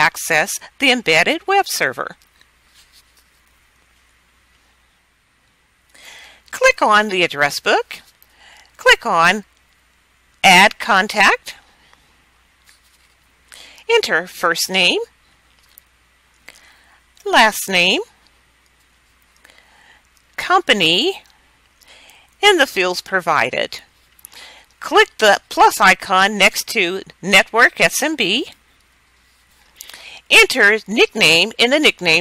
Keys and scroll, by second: 0.0-0.4 typing, 1.0 Return, 15.6-17.5 typing, 19.0-20.6 typing, 22.1-24.5 typing, 31.1-32.2 typing.